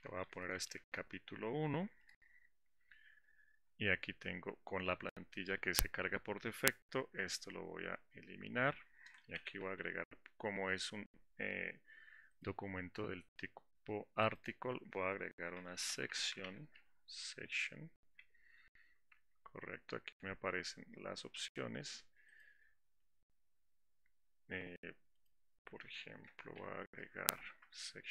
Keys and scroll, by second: 9.7 Delete.